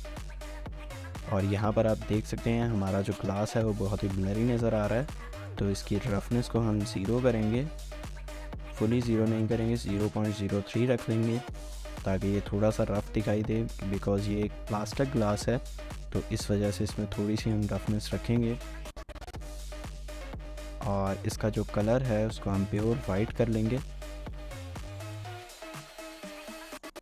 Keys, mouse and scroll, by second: 0.1 shift+middle click, 0.8 scroll up 1, 0.9 shift+middle click, 16.1 middle click, 20.4 shift+middle click, 24.1 middle click.